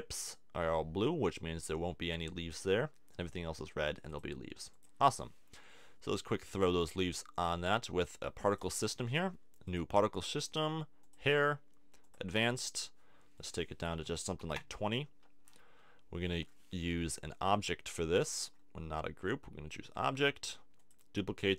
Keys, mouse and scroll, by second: 4.1-15.2 drag, 15.2-20.0 middle drag, 20.0-21.5 drag.